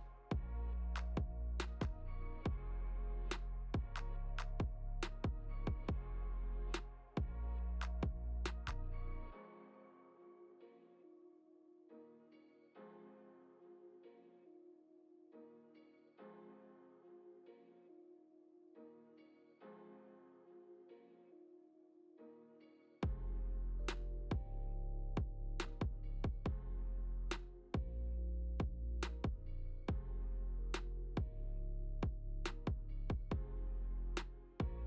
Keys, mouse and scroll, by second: 1.1 scroll down 2, 1.6 middle click, 3.2 g, 6.2 middle click, 8.1-8.9 scroll up 4, 8.8 middle click, 12.2 Tab, 12.7-13.1 scroll down 3, 13.0 Tab, 13.3 click, 13.7 middle click, 15.6 Tab, 17.4 Tab, 17.8 click, 18.5 g, 20.2 scroll up 2, 20.6 shift+middle click, 21.2-21.6 scroll up 2, 21.6 middle click, 22.7 click, 23.0 Tab, 23.9 click, 24.4 middle click, 24.9 scroll up 2, 25.5 shift+middle click, 26.7 click, 27.4 shift+click, 27.8 click, 28.5 click, 28.9 shift+click, 29.5 click, 29.7 middle click, 30.9 click, 31.4 shift+middle click, 32.0 scroll down 3, 32.9 r.